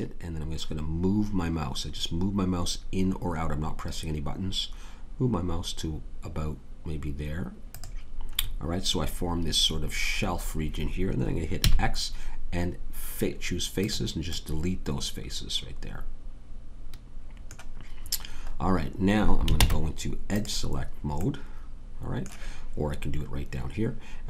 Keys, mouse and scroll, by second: 11.6 x, 19.5 ctrl+Tab.